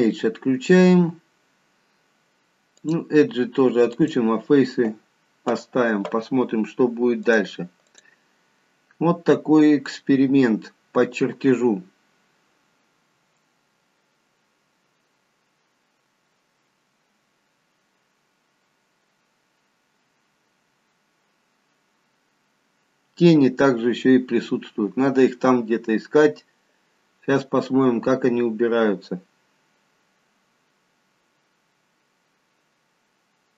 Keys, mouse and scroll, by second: 3.9 click, 7.3 click.